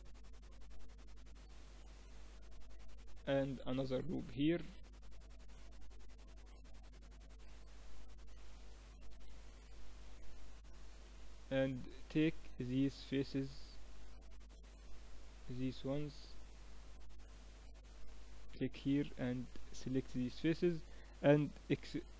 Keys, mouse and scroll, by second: 3.0 ctrl+r, 7.0 click, 7.5-8.8 middle drag, 13.7-17.5 right drag, 14.4 a, 16.6 a, 19.3 middle click, 19.8-22.1 right drag.